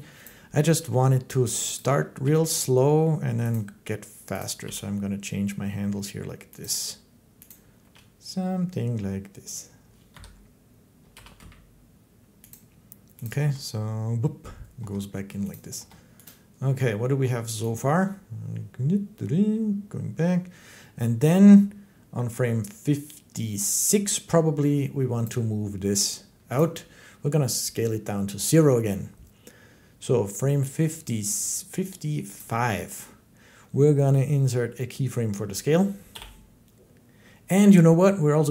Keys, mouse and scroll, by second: 0.0 click, 1.6 click, 2.1 g, 3.4 click, 4.2 click, 4.5 g, 6.5 click, 7.3 click, 7.7 g, 9.9 Escape, 11.0 g, 11.2 x, 12.3 click, 13.1 click, 13.2 space, 14.6 space, 15.4 click, 15.6 space, 16.1 click, 16.5 space, 25.0 click, 26.4 click, 32.2 click, 35.9 i.